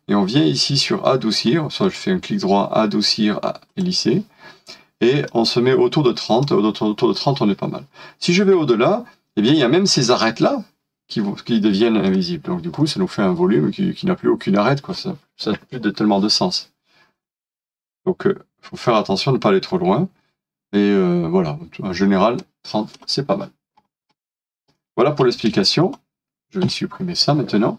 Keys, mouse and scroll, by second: 1.8 double click, 12.8 middle click, 17.3 double click, 23.8-24.7 scroll down 1, 24.7 middle click, 25.3 space, 25.7 double click.